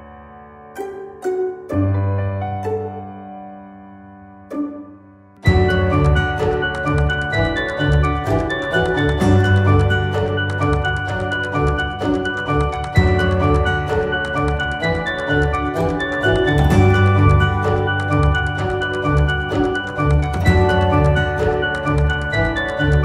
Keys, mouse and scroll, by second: 0.4 scroll down 2, 0.7 middle click, 1.3 click, 1.6-2.8 middle drag, 2.8 g, 4.2 scroll down 1, 4.4-5.6 middle drag, 5.6 click, 5.9 scroll down 1, 6.1-6.5 scroll up 4, 6.5-7.1 shift+middle drag, 7.1 click, 7.4 click, 8.0 r, 10.1 click, 10.7 r, 12.4 click, 12.9 KP_3, 13.8-14.5 scroll up 3, 14.5-15.6 middle drag, 15.6 scroll down 2, 15.9-18.2 middle drag, 18.2 click, 18.6 scroll down 2, 18.9-19.7 scroll up 3, 19.7-21.5 middle drag, 22.0 scroll up 1, 22.7-23.0 scroll down 1.